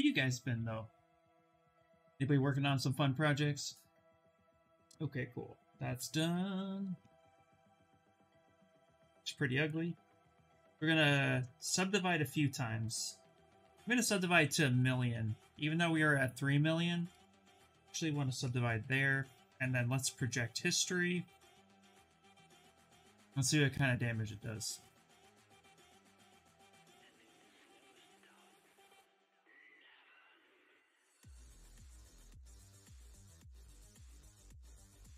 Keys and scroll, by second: 7.6 shift+f, 10.8 ctrl+d, 11.3 ctrl+d, 11.6 shift+f, 12.9 ctrl+d, 18.6 2.